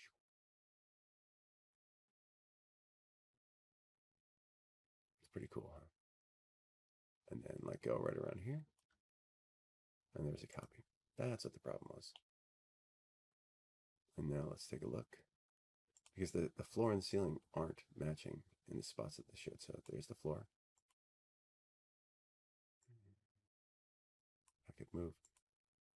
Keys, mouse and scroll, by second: 0.0 middle click, 2.6 click, 14.3 shift+click, 16.3 click, 18.6 middle click, 18.9 middle click, 20.2 middle click, 20.3 middle click, 20.4 middle click, 20.6 scroll, 21.6 click, 25.4 click.